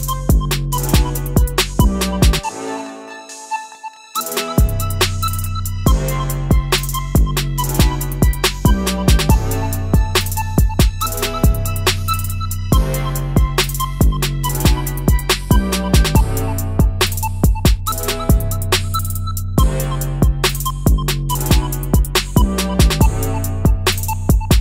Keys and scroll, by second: 0.9 ctrl+z, 5.0 ctrl+z, 19.9 Left, 20.1 Left, 20.3 Left, 20.9 Left, 21.1 Left.